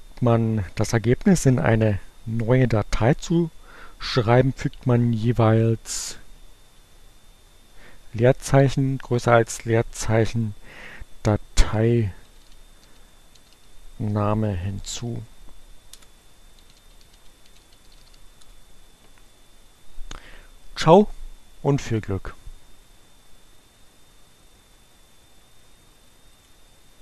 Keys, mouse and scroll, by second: 5.7 Up, 6.4 space.